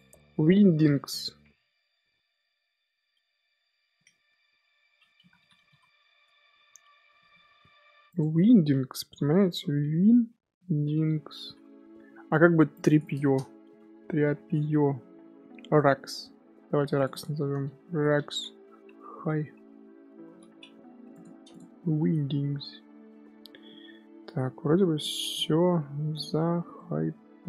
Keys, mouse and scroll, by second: 8.1-11.1 drag, 21.1 click, 21.5 click, 21.8-26.2 shift+middle drag, 26.2-26.7 scroll down 1, 26.7-27.1 middle drag, 27.1 scroll up 2.